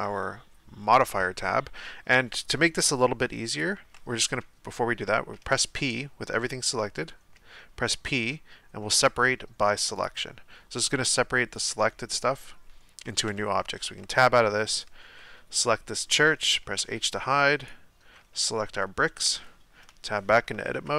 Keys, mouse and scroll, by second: 5.3 p, 7.4 p, 13.9 Tab, 14.7 right click, 15.5 right click, 16.8 h, 17.6 right click, 19.2 Tab, 20.5 a, 20.7 KP_1.